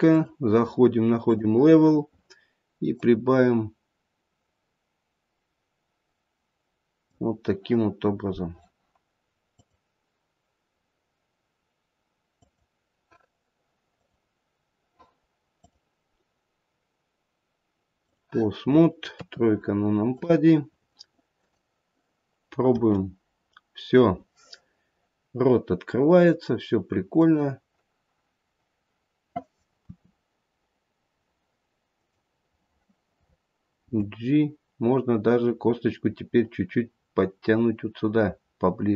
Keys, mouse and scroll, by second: 0.0 click, 2.9 click, 9.5 click, 13.9 click, 15.6 click, 19.2 KP_3, 20.1 click, 21.3 click, 22.7 r, 29.8 r, 33.7 g.